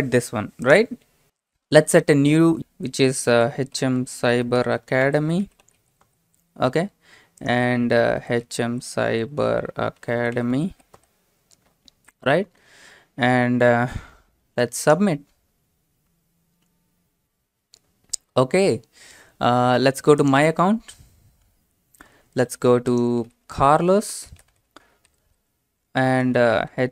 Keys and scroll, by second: 3.1-6.5 typing, 8.2-11.0 typing, 23.0-25.3 typing, 26.1 Tab, 26.4-26.9 typing.